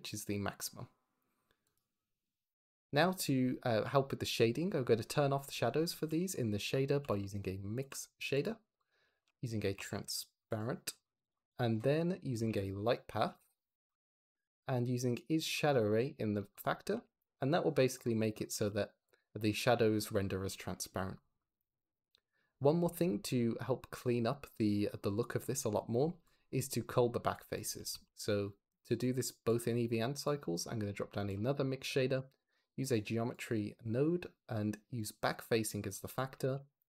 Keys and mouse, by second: 1.6 click, 5.7 shift+a, 8.7 click, 9.0 shift+a, 10.9 click, 11.2 click, 12.2 shift+a, 14.4 drag, 16.4 click, 16.8 ctrl+h, 17.1 g, 18.1 click, 18.5 g, 18.9 click, 26.1 click, 27.8 shift+d, 28.7 click, 29.2 click, 29.7 g, 30.2-30.6 drag, 31.1 shift+a, 34.9 click, 35.8 click, 36.2 ctrl+h, 36.4 g.